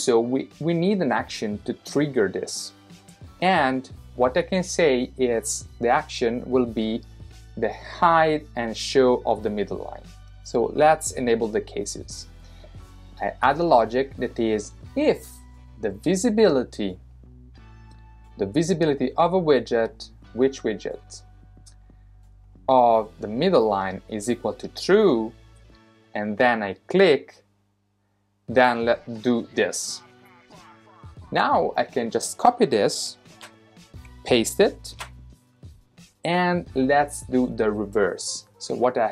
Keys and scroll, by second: 33.3 super+c, 34.9 super+v.